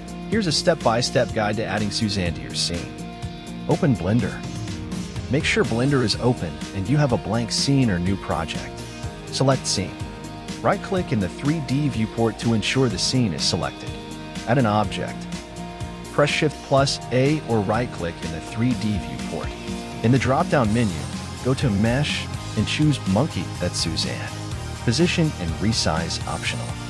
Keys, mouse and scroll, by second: 0.9 right click, 6.4 shift+a, 20.6 g, 24.9 r.